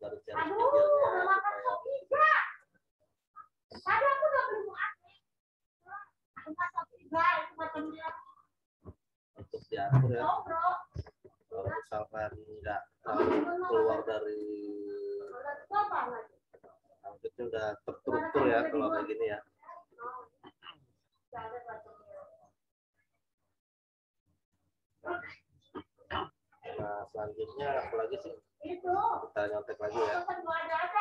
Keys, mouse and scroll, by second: 14.3 click, 22.9 click, 28.3 click, 29.4 click.